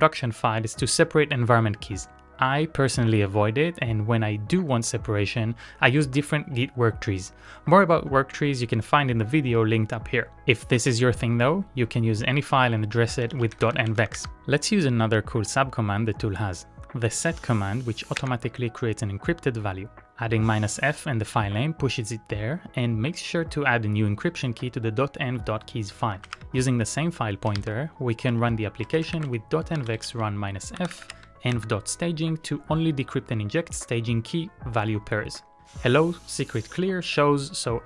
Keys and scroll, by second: 13.4 ctrl+a, 13.6 shift+k, 14.1 Up, 14.3 Up, 14.8 Tab, 18.4 Return, 25.8-32.5 typing.